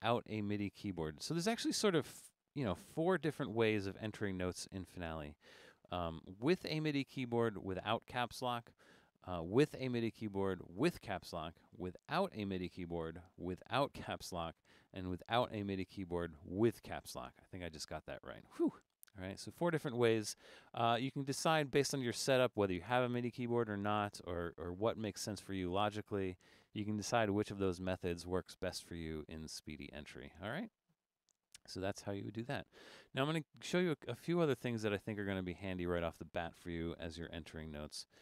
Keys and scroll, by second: 3.1 Caps_Lock.